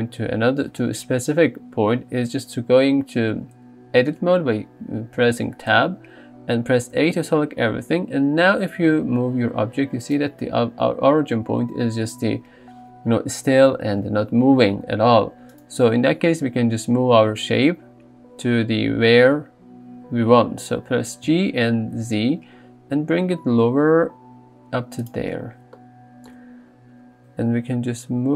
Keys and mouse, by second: 5.9 Tab, 7.0 a, 8.8 g, 21.5 g, 22.0 z, 25.0 click, 27.7 g.